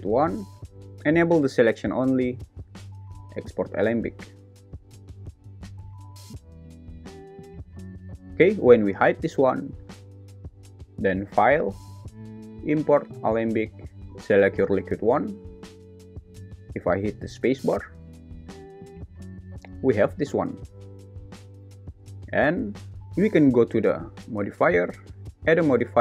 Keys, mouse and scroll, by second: 9.0 h, 9.7 click, 11.2-14.0 drag, 17.2 space, 22.0 space, 25.5-26.0 drag.